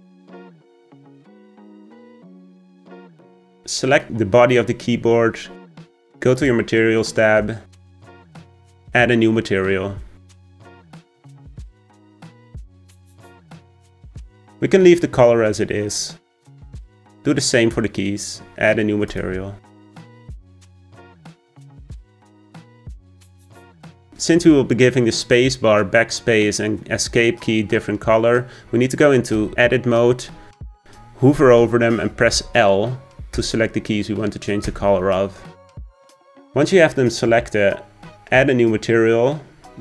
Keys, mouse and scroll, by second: 0.8 click, 2.2-4.0 middle drag, 4.0 click, 6.4 click, 7.9-11.5 drag, 17.0 click, 19.1-21.1 drag, 21.1-24.0 scroll up 1, 29.5 Tab, 32.4 l, 33.4 l, 34.7 l.